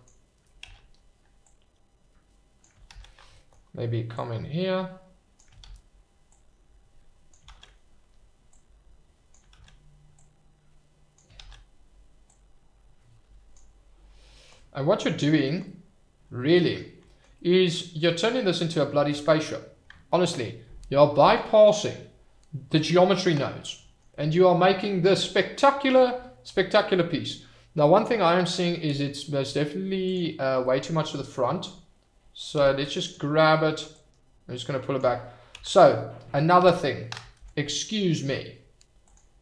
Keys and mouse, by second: 0.7 ctrl+z, 1.6 click, 3.0 ctrl+z, 3.4 shift+middle click, 4.1-5.3 drag, 5.7 ctrl+z, 6.3 click, 7.5 ctrl+z, 8.5 click, 9.6 ctrl+z, 10.2 click, 11.5 ctrl+z, 12.4-13.5 drag, 14.5 click, 15.6-16.8 drag, 17.3 click, 17.9 shift+middle click, 18.3 click, 19.2 click, 20.1 middle click, 24.1-25.9 middle drag, 28.0 shift+middle click, 28.2 middle click, 30.0 click, 32.5 f, 34.2 click, 35.7 ctrl+z, 36.6 Tab, 39.1-39.4 drag.